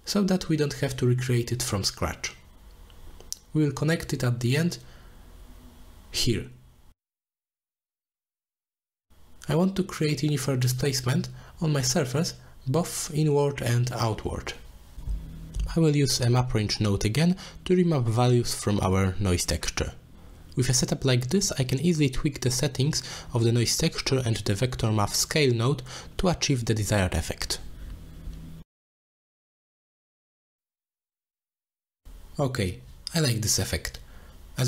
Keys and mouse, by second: 0.4 middle click, 1.2-1.7 drag, 2.0 middle drag, 2.5 click, 3.4-3.8 shift+drag, 4.3 middle click, 4.7 shift+s, 6.6 shift+d, 8.0 click, 9.3 click, 9.5 click, 10.1 click, 10.6 click, 11.5-13.2 drag, 14.1 click, 14.3-15.7 drag, 17.2 middle click, 17.6 middle click, 18.0 click, 18.5 click, 22.5 click, 24.0-25.7 drag, 25.7 middle click, 28.1 click, 29.3-32.6 middle drag, 33.3-34.6 middle drag.